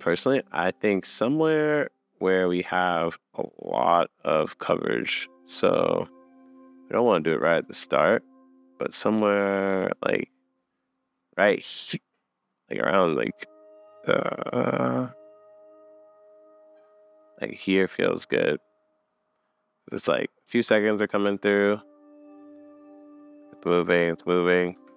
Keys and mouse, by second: 4.6-6.0 middle drag, 6.1 middle click, 6.3-7.7 middle drag, 20.6 space, 24.8 space.